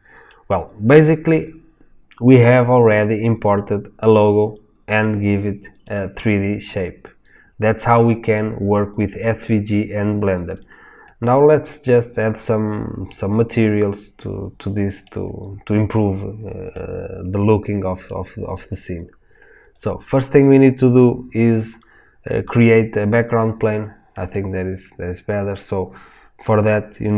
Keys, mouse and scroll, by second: 5.9 click, 11.1-19.7 middle drag, 19.7 click, 24.4-27.1 middle drag.